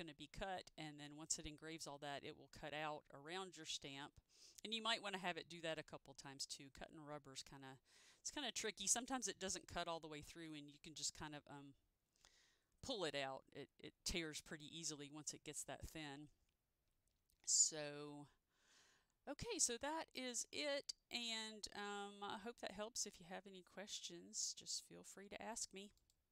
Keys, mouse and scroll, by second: 16.4 click, 16.4-17.0 scroll down 1, 17.0-17.8 scroll up 1, 20.3 click, 21.7-22.0 scroll down 1, 22.5 scroll down 1, 22.5-22.8 scroll up 1, 26.1 click.